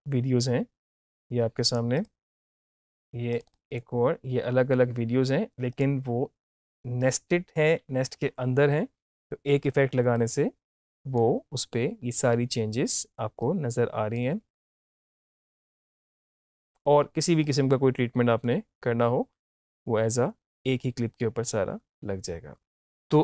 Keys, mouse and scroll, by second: 2.0 click, 5.8 click, 9.5-13.5 drag, 13.5-17.4 drag, 17.4-23.2 drag.